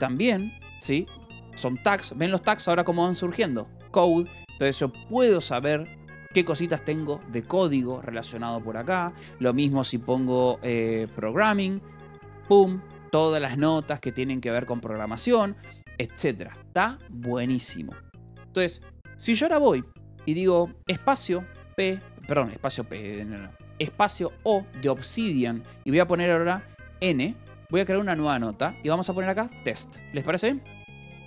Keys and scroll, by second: 0.9 ctrl+p, 6.2 ctrl+p, 8.9-11.5 typing, 13.3 ctrl+p, 16.3 Escape, 20.9 space, 21.5 p, 22.1 Escape, 22.6 u, 23.0 Escape, 23.7 space, 24.3 o, 27.4 n, 29.2-30.5 typing, 30.7 Return.